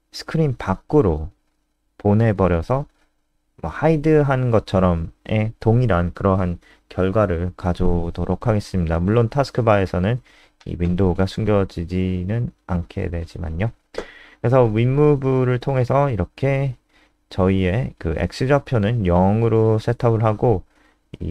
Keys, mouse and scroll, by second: 0.0-1.8 typing, 9.9 0.